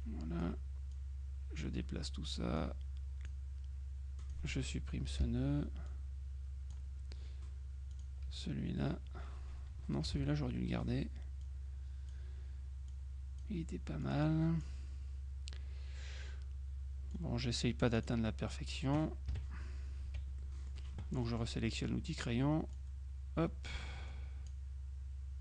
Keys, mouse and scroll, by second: 1.0 click, 2.7 click, 4.3 click, 5.3 Delete, 6.0 click, 8.0 click, 8.4 Delete, 10.3 ctrl+z, 11.5 click, 13.0 click, 14.1 click, 17.2-19.1 drag, 18.3 right click, 19.4 KP_Subtract, 20.5 F6, 20.5-21.9 drag, 22.8-25.1 drag.